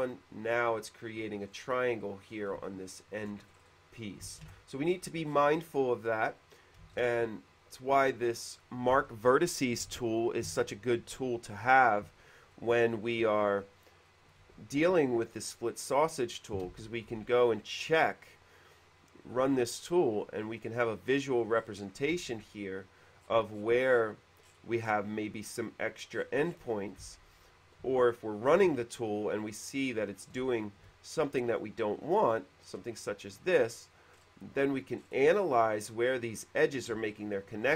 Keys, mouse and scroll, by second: 1.7 middle click, 2.9 shift+middle click, 3.7 middle click, 4.7 ctrl+z, 5.0 middle click, 5.5 middle click, 7.1 ctrl+z, 7.1 shift+e, 7.2 click, 12.7 middle click, 14.2 middle click, 14.5 scroll down 1, 15.7 click, 15.8 scroll down 1, 16.9 space, 16.9 q, 17.9 click, 18.1 click, 20.1 click, 21.3 middle click, 21.7 middle click, 22.5 e, 22.5 click, 23.4 middle click, 23.7 middle click, 24.1 middle click, 24.5-25.0 scroll up 1, 25.0 middle click, 26.3 middle click, 27.3 space, 28.5 shift+click, 30.7 shift+click, 31.7 click, 32.8 middle click, 34.4 middle click, 35.1 middle click, 37.3 shift+middle click.